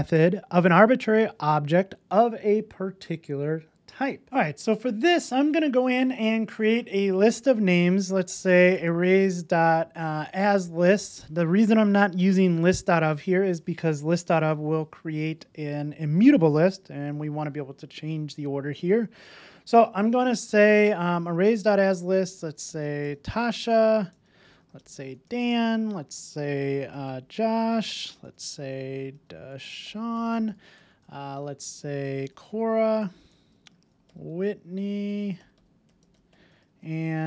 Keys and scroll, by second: 4.2 super+s, 10.8 Return.